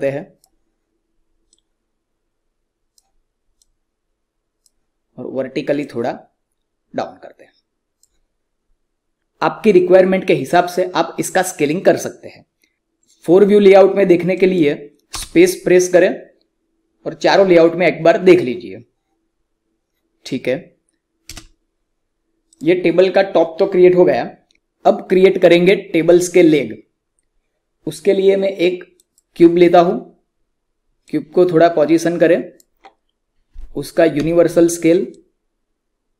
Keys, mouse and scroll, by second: 14.3 click, 15.1 space, 21.3 space, 22.4 click, 28.9-34.1 drag, 34.1 r, 35.1-36.1 drag.